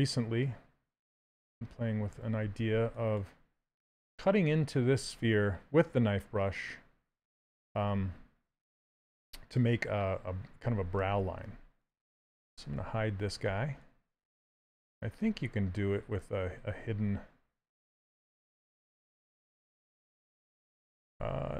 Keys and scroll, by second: 13.4 s, 16.7 ctrl+space, 21.1 ctrl+z.